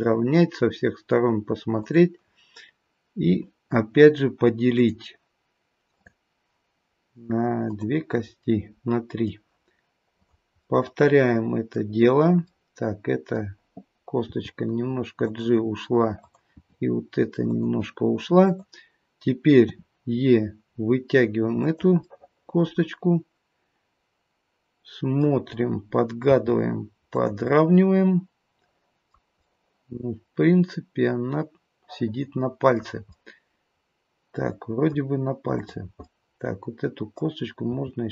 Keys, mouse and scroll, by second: 1.8 click, 4.7 click, 8.5 click, 8.5 middle click, 10.1 click, 10.5 middle click, 12.5 middle click, 14.2 g, 16.2 click, 16.6 g, 18.5 click, 21.4 e, 22.0 middle click, 27.4 middle click, 29.4 middle click, 33.1 middle click, 35.5 click, 36.0 middle click, 37.6 g.